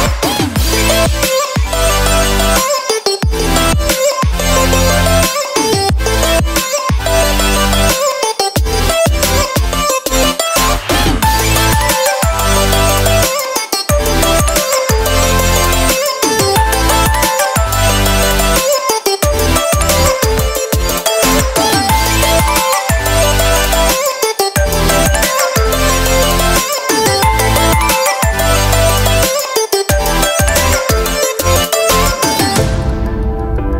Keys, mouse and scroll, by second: 0.2 l, 5.6 alt+a, 7.1 l, 13.3 g, 16.4 alt+a, 19.9 click, 21.0 a, 21.4 scroll, 22.4-23.0 scroll, 23.1 alt+shift+a, 23.5 scroll, 25.3 scroll, 25.8 scroll, 27.4 click, 27.9 shift+g, 29.2 click, 29.8 g, 31.1 r, 31.8 g, 33.4-33.7 shift+scroll.